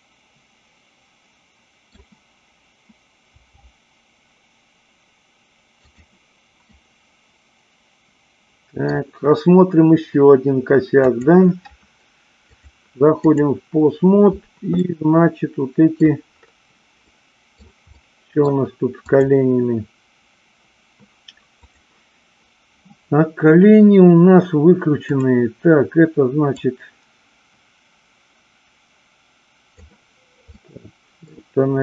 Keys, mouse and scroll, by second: 3.3 g, 5.9 click, 6.7-8.9 middle drag, 8.9-11.1 scroll down 1, 11.1 click, 12.6-13.5 drag, 14.7-16.0 middle drag, 17.0-17.6 middle drag, 17.9-18.4 middle drag, 19.0-20.1 drag, 21.6-23.0 drag, 26.6-29.7 drag, 30.5-31.3 middle drag.